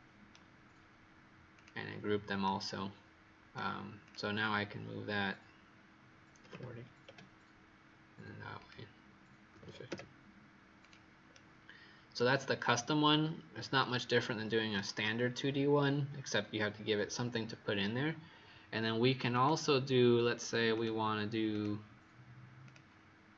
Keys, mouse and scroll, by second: 1.4 click, 2.4 right click, 3.9 click, 6.4 KP_4, 7.0 KP_Enter, 7.0 KP_0, 8.5 click, 9.4 KP_5, 9.5 KP_0, 9.8 KP_Enter, 10.7 click, 11.2 right click, 13.1-13.7 scroll down 1, 13.7 right click, 19.2 click.